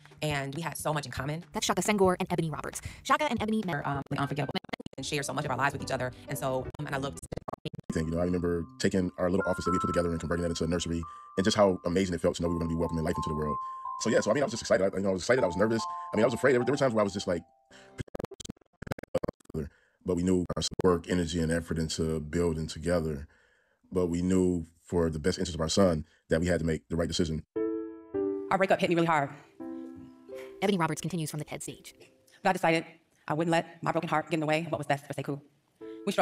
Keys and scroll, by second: 1.2 super+4, 1.4 super+4, 1.6 super+4, 3.9 super+2, 4.4 super+2, 4.5 super+2, 4.6 super+2, 7.1 super+2, 7.2 super+2, 7.3 super+2, 10.3 super+j, 13.2-14.9 typing, 17.2 Return, 17.6 super+2, 17.9 super+2, 18.0 super+2, 18.1 super+2, 20.6 super+1, 24.5 super+4, 25.0 super+4, 25.1 super+4, 25.2 super+4, 30.8 super+j, 31.8-34.3 typing, 35.6 Return, 36.1 Return.